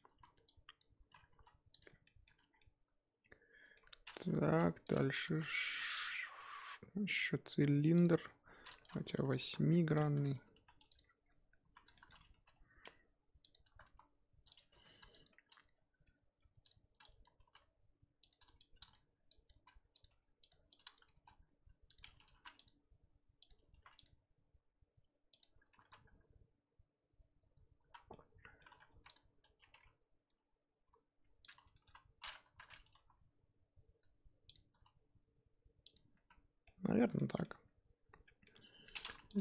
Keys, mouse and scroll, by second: 0.1 z, 0.4-1.0 drag, 1.0 z, 1.3 s, 1.9 scroll down 1, 2.0 middle drag, 2.3 Tab, 2.4 scroll down 3, 2.6-3.8 middle drag, 3.8-4.4 scroll up 3, 4.4 KP_1, 4.8 click, 5.2 shift+a, 8.4-8.8 scroll down 4, 8.8 click, 9.7-10.5 scroll down 7, 10.5 g, 11.0-11.6 scroll up 9, 11.6 z, 11.9-12.3 shift+middle drag, 12.3 g, 13.6 Tab, 13.8 s, 14.7 g, 15.4 scroll up 2, 15.6 g, 17.0 click, 17.4 g, 18.6 click, 19.5 s, 20.1 g, 20.7 click, 21.1 s, 22.3 ctrl+r, 23.7 ctrl+r, 25.8 3, 27.8 z, 28.1 middle click, 28.9 3, 29.0 click, 30.8 i, 31.8 KP_1, 32.4 z, 32.9 e, 34.7 s, 36.1 z, 36.5 scroll down 2, 36.6-37.2 middle drag, 37.2 Tab, 37.4-38.9 middle drag, 38.9-39.3 scroll up 1, 39.3 click.